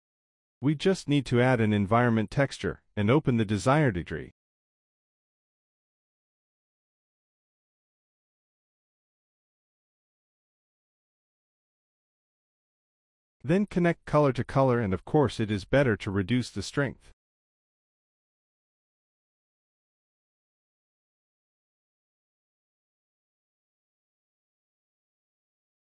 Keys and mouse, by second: 0.0 click, 1.5-2.0 drag, 3.3 middle click, 3.6 click, 4.2 shift+a, 7.4 click, 13.1-14.2 drag, 14.4 click, 15.6 middle click, 15.9 z, 20.8-21.7 middle drag, 22.0 middle click, 22.4 KP_0, 23.5 middle drag, 24.5-25.5 drag.